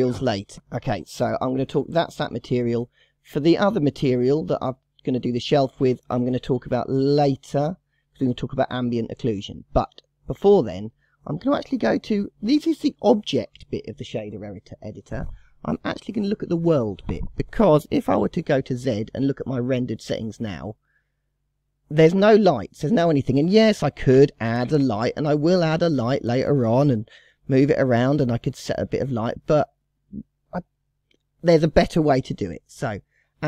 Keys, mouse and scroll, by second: 3.2 click, 4.0 click, 9.1-10.4 drag, 10.8-13.9 drag, 16.5-17.5 scroll down 3, 18.1 z, 23.7 shift+a, 26.9 g, 32.2 Delete.